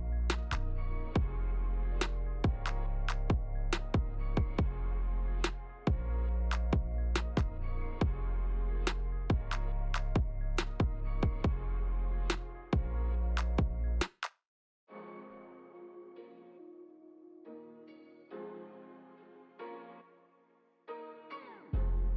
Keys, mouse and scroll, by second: 2.2 middle click, 3.2 click, 4.3 g, 9.2 middle click, 10.2 shift+middle click, 10.5 middle click, 11.2 click, 12.6 Tab, 13.2 middle click, 13.8 click, 14.3 click, 14.9 middle click, 15.5 click, 16.0 click, 16.5 middle click, 17.2 Tab, 17.4 right click, 18.0 click, 18.2 middle click, 18.7 ctrl+z, 18.9 ctrl+z, 19.3 middle click, 20.3 click, 20.7 click, 21.1 right click, 21.7 click, 21.9 middle click.